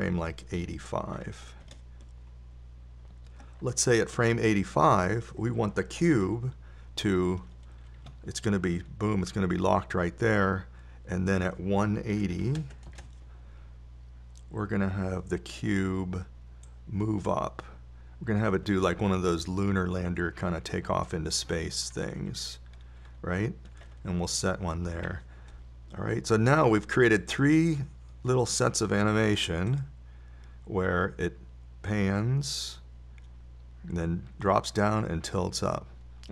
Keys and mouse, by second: 0.3-2.2 drag, 8.7 i, 12.7 click, 18.1-19.2 drag, 20.0-24.4 middle drag, 26.3 i, 28.9-33.1 drag.